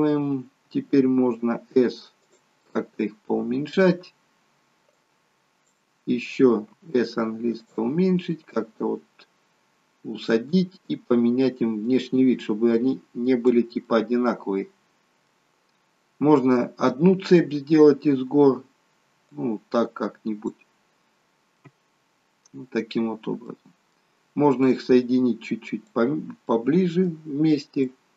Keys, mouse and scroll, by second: 1.4 s, 2.6 middle click, 3.6 scroll up 4, 5.0 click, 6.7 s, 8.6 click, 11.8 click, 13.8 middle click, 15.7 scroll down 2, 19.4 click, 21.6 middle click, 23.0 scroll up 2, 23.5 middle click, 24.6 click, 26.5 middle click, 27.8 middle click.